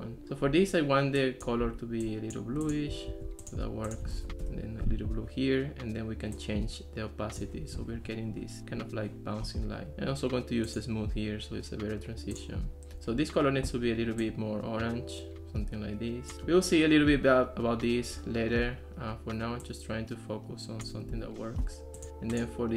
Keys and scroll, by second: 3.1 super+c, 4.3 super+v, 4.4 Return.